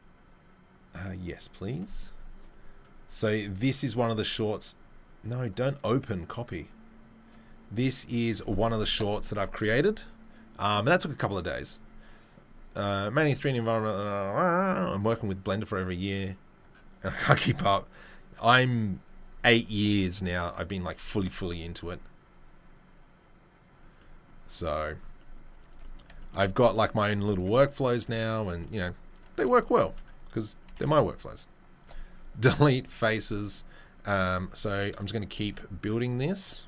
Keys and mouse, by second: 25.5 Tab, 25.7 Tab, 28.1 click, 28.2-34.5 middle drag, 32.4 Delete, 35.4 ctrl+r.